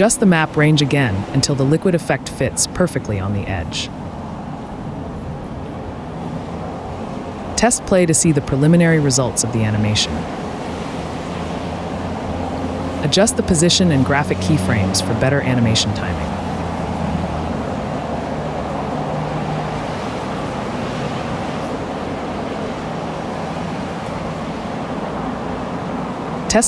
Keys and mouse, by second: 0.6-2.5 drag, 3.3 click, 6.4 right click, 7.8 click, 8.8 space, 9.5 space, 10.3 click, 10.7 space, 11.0 space, 11.6 space, 12.0 space, 13.7 click, 14.1 click, 14.7 KP_Decimal, 16.7 click, 17.1 click, 18.8 click, 19.3 click, 20.3 click, 20.6 right click, 22.0 KP_Decimal, 22.5 KP_Decimal, 24.0 r, 24.9 s, 25.9 r.